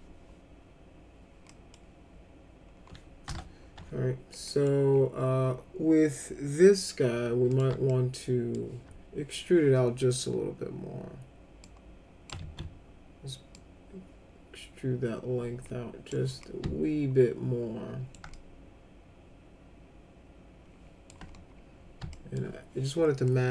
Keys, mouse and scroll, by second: 1.5 middle click, 3.2 F4, 4.3 middle click, 7.5 click, 7.8 alt+middle click, 11.6 click, 12.4 ctrl+z, 13.5-16.0 drag, 16.4-18.1 alt+middle drag, 18.3-21.0 alt+middle drag, 22.1 alt+middle click.